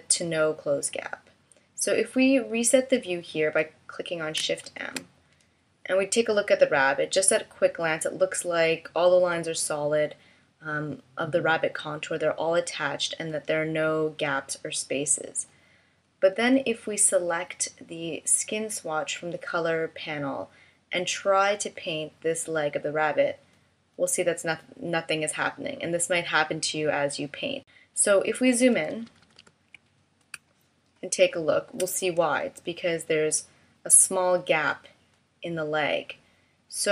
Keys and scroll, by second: 4.6 shift+m, 29.2 super+=, 30.3 space.